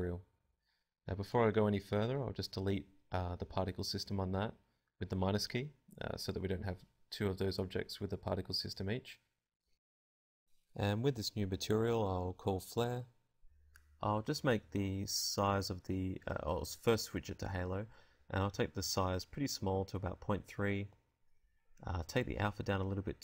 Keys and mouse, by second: 6.3 click, 8.8 click, 9.5 click, 10.8-11.8 drag, 13.8 click, 15.2 click, 22.0-23.2 drag.